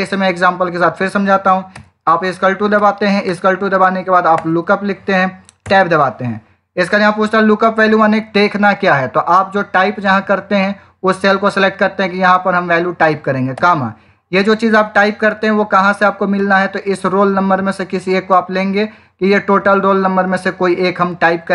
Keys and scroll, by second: 1.6 =, 2.7 l, 3.2 o, 13.4 '.